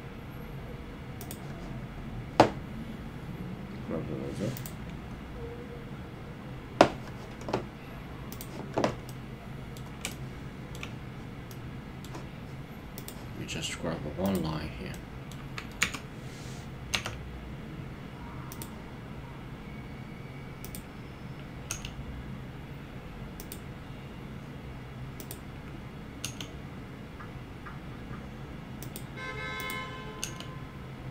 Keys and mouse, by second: 1.2 click, 8.4 click, 9.1 middle click, 10.1 shift+middle click, 11.5 middle click, 13.0 click, 14.9 middle click, 15.8 KP_3, 17.0 g, 18.5 click, 20.6 click, 21.7 g, 23.4 click, 26.2 g, 28.8 click, 30.2 g.